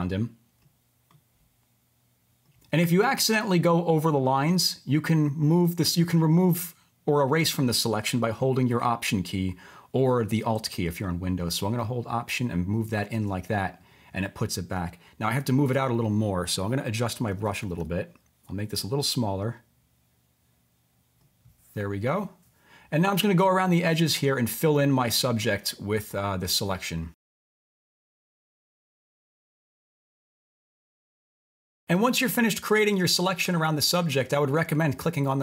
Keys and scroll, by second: 3.7 typing, 17.3-17.8 typing, 26.9 typing, 31.0 typing, 33.5 typing.